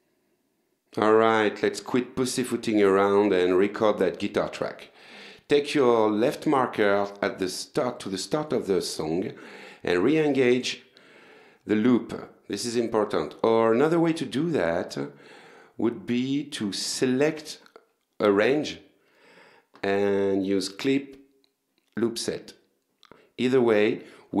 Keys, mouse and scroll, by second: 6.2 click, 7.1 click, 10.2 click, 10.8 click, 15.5 click, 16.2 click, 16.8-17.9 drag, 22.0 click.